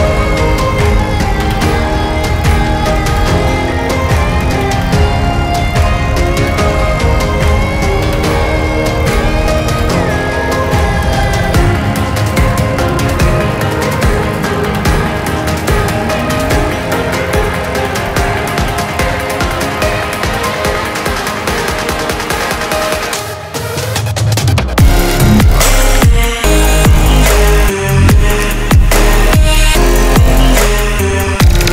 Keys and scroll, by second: 11.9 Up, 25.3 Up, 25.3 ctrl+z, 25.7 ctrl+z, 28.4 Up.